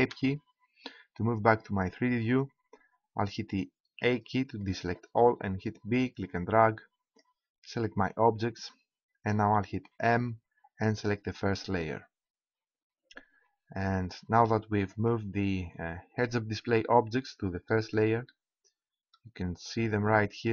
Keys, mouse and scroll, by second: 4.0 a, 5.3 b, 9.9 m, 15.6-16.7 drag, 16.8 click.